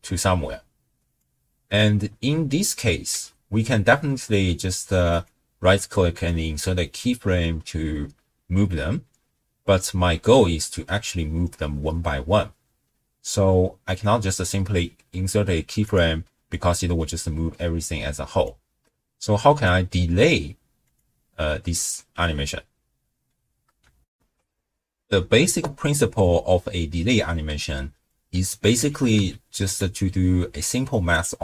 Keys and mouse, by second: 3.1 w, 5.1-9.6 drag, 13.9 click, 16.5-18.5 drag, 19.5-20.9 drag, 22.2 w, 24.1 ctrl+alt+shift+w, 24.3 ctrl+alt+shift+q, 26.9 middle click, 28.2 click, 28.9 g.